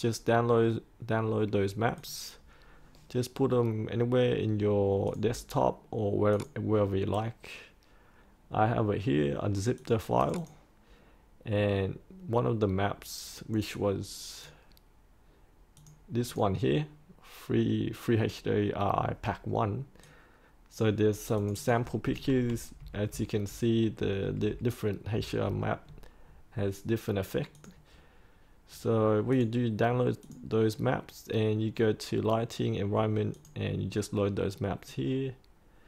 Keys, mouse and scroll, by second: 1.9 click, 5.2-21.1 drag, 22.4 Right, 22.7 Right, 23.0 typing, 23.4 Right, 23.9 Right, 27.5 click, 30.3-35.8 drag.